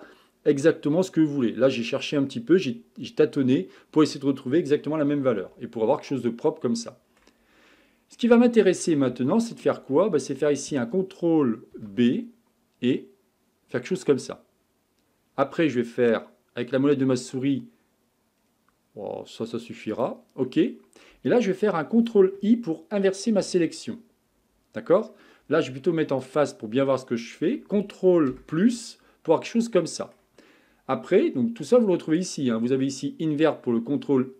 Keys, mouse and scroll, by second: 6.2-7.9 middle drag, 7.9-8.7 scroll up 4, 8.7-9.3 scroll down 3, 9.3-11.7 shift+middle drag, 11.7 ctrl+b, 23.3 ctrl+i, 26.2-28.3 drag, 28.3 ctrl+KP_Add, 29.3-31.7 middle drag, 31.7-34.3 drag.